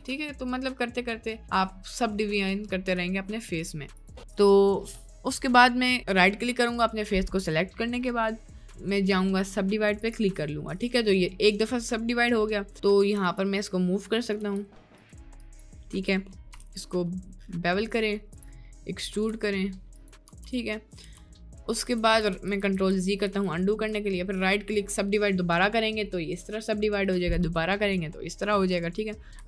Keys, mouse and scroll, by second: 0.5-2.9 ctrl+drag, 4.0 click, 6.7 click, 8.1-10.7 right drag, 11.0 middle click, 13.0 2, 14.7 g, 15.6 click, 16.8 ctrl+b, 18.8 middle click, 19.3 e, 20.3 Tab, 20.6 middle click, 20.7 click, 21.1 Tab, 21.5 click, 21.9 ctrl+z, 22.1 ctrl+z, 22.4 ctrl+z, 22.7 ctrl+z, 22.9 ctrl+z, 23.3 ctrl+z, 24.4 right click, 24.9 middle click, 27.1 right click, 28.4 middle click.